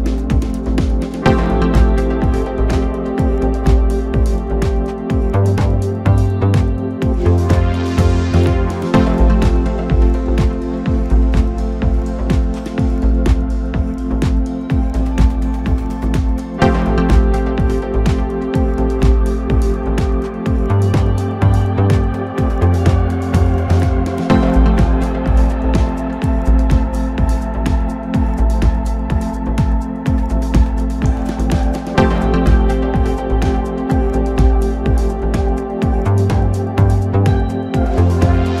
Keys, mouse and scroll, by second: 0.2-0.7 scroll up 1, 0.7 click, 0.9 s, 2.2 click, 2.3 s, 3.2-4.7 middle drag, 4.7 click, 4.8 s, 6.6 click, 6.9 s, 7.7-8.5 middle drag, 8.5 s, 9.2-9.5 middle drag, 9.5-10.3 scroll up 2, 10.3-11.0 scroll down 2, 11.0 click, 11.2 s, 11.8-12.8 middle drag, 12.8 click, 12.9 s, 13.9-14.2 middle drag, 14.2 scroll up 2, 14.4-15.8 middle drag, 15.8 scroll down 2, 15.9-17.2 middle drag, 17.2 KP_7, 18.7 click, 20.2 shift+d, 21.7 s, 22.9 click, 23.1 s, 24.1 click, 24.3 s, 25.2 click, 25.4 s, 26.5 click, 26.7 s, 27.5 click, 27.7 s, 28.3-30.1 middle drag, 30.1 KP_1, 31.0 shift+click, 31.5 scroll down 1, 31.8 middle click, 32.3 scroll up 2, 33.0 click, 34.1-34.5 scroll down 2, 34.5 click, 34.9 click, 35.0-35.5 scroll up 2, 35.5 KP_1, 36.1 shift+middle click, 36.4-36.7 scroll up 2, 36.7-38.1 middle drag, 38.1-38.6 scroll down 3.